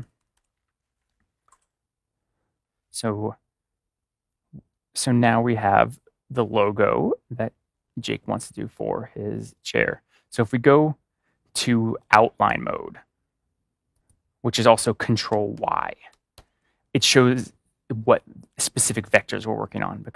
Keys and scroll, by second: 15.5 ctrl+y, 16.3 ctrl+y.